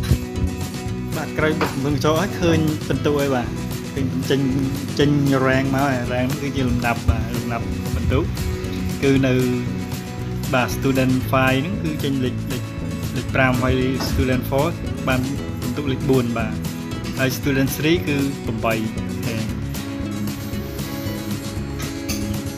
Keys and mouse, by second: 1.9-2.9 drag, 4.5 click, 6.2 click, 6.6 click, 8.2 click, 9.1 click, 9.8 click, 10.6 click, 11.8 click, 14.1 click, 14.9 click, 16.0 click, 17.6 click, 19.5 click.